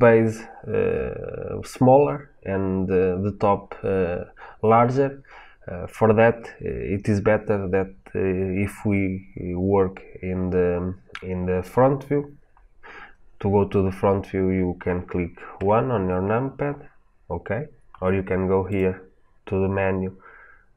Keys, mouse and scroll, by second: 15.4 KP_1, 18.6-20.7 drag.